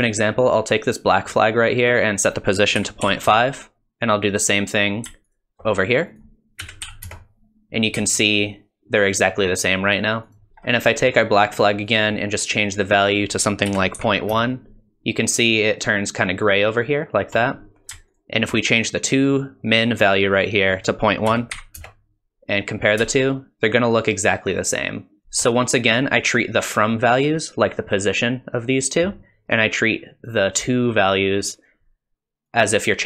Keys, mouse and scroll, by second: 0.9 click, 2.2 click, 5.3 ctrl+shift+click, 6.2 click, 8.4 click, 11.9 click, 18.2 ctrl+shift+click, 20.5 typing, 20.9 click, 23.3 ctrl+shift+click, 23.3 typing, 31.7 click.